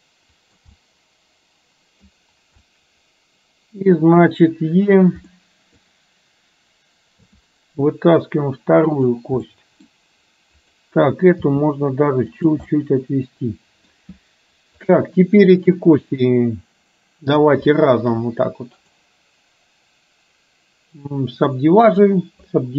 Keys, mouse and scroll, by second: 0.8-2.2 middle drag, 2.7-4.3 middle drag, 5.4 middle click, 7.3 e, 9.5 middle click, 10.8 click, 12.8-14.0 middle drag, 15.0 click, 17.8 shift+click, 19.0-22.2 right drag.